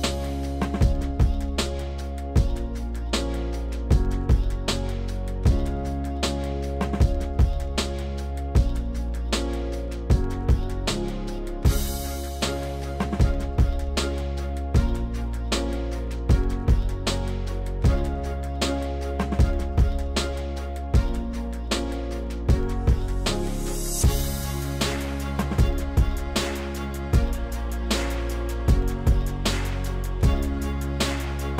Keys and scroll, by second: 0.8 s, 4.3 s, 10.7 s, 16.2 s, 17.1 s, 31.0-31.5 typing.